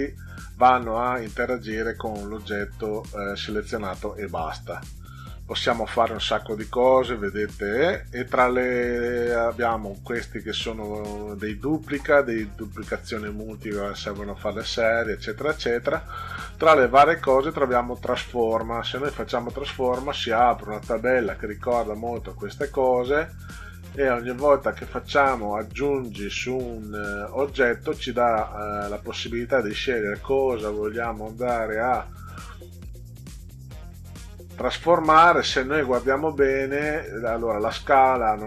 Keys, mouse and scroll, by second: 18.5 click, 20.1-20.8 drag, 23.5 click, 25.6 click.